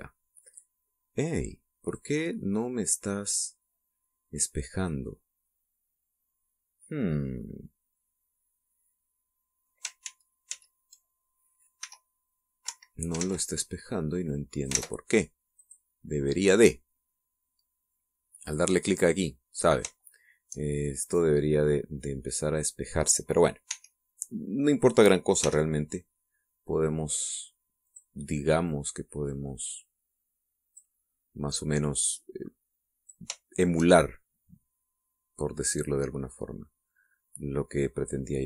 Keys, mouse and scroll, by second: 0.1 click, 1.1-3.3 drag, 3.3 middle click, 4.2 click, 4.7 middle click, 4.9-6.0 drag, 6.0-10.6 middle drag, 10.8 ctrl+z, 12.6 e, 13.4 Escape, 13.9 ctrl+z, 15.0 click, 15.5 ctrl+z, 16.4 click, 19.2 click, 20.8 shift+middle click, 21.4-23.3 shift+middle drag, 24.5 e, 26.2 x, 28.6 click, 29.5-31.8 drag, 32.6-34.1 drag, 34.2 shift+middle click, 34.8 shift+middle click, 35.6-37.7 drag, 37.7 middle click.